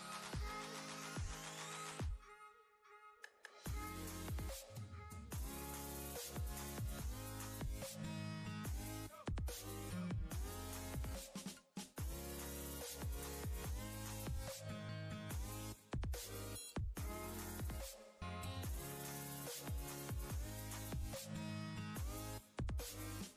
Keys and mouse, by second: 3.4 click, 12.1 ctrl+space, 12.2-13.4 ctrl+click, 12.6 ctrl+space, 13.7 click, 17.4 click, 20.5 ctrl+space, 20.6-22.1 ctrl+click, 22.1 ctrl+space, 22.5 click, 22.7-23.1 space.